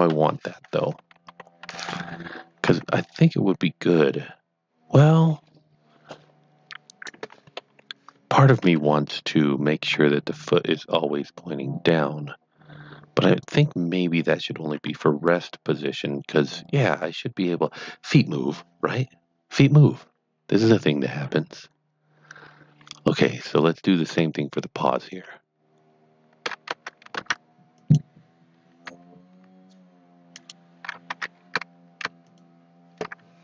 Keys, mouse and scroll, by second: 0.0 KP_1, 1.1 ctrl+KP_3, 2.7 r, 6.8 right click, 7.6 KP_3, 8.6 KP_1, 9.9 r, 13.3 r, 13.4 right click, 14.8 r, 17.0 right click, 23.3 right click, 23.4 click, 24.1 Tab, 24.9 click, 26.7 Tab, 27.2 Tab, 27.8 click, 30.3 click, 32.2 click.